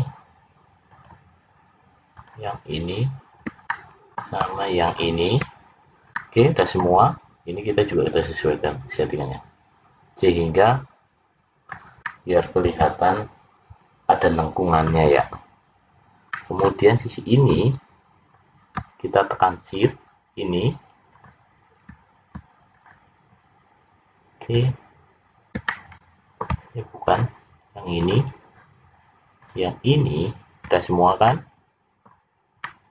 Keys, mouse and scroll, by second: 0.8 shift+click, 2.1 shift+click, 3.7 middle click, 4.8 shift+click, 6.1 middle click, 8.3 click, 12.0 middle click, 16.2 middle click, 17.3 click, 19.6 shift+click, 21.1 shift+click, 22.9 shift+click, 24.5 shift+click, 25.6 middle click, 27.0 shift+click, 27.9 shift+click, 29.4 shift+click, 30.8-31.2 scroll down 3, 31.2 middle click, 32.6 middle click.